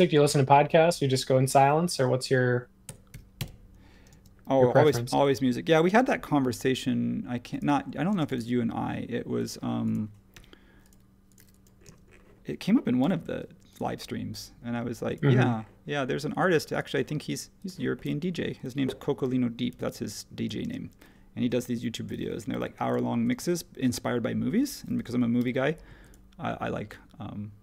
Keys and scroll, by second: 2.8-5.9 typing, 8.1 space, 10.3 l, 11.3-11.9 typing, 13.0 l, 15.2 Escape, 17.7 Escape, 19.7 e, 20.6 space, 22.5 h, 23.3 space, 25.4 m.